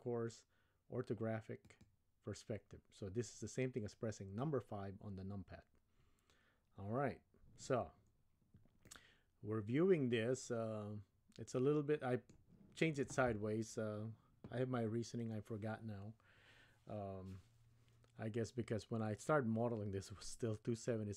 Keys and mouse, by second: 1.6 click, 8.9-12.4 middle drag.